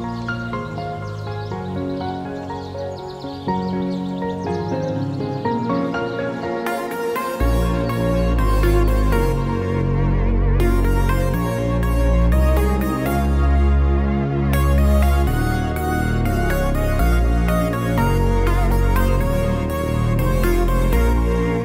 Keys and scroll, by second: 0.1 ctrl+v, 4.4 ctrl+d, 7.2 1, 7.3 0, 7.5 Return, 11.5 shift+h, 14.6 ctrl+z, 16.5 shift+Left.